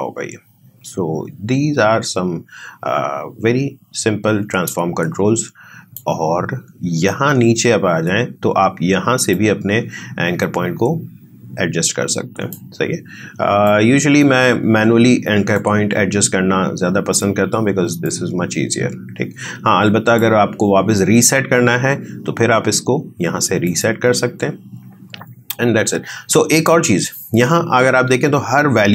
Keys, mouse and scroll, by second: 9.3-17.9 drag, 18.0-22.6 drag, 23.6 click.